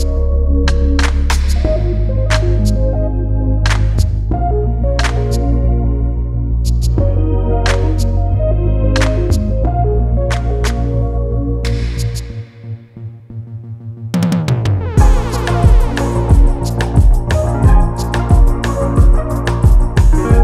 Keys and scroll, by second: 3.4 F1, 3.7 2, 8.3 Delete, 15.1 4, 18.9 3.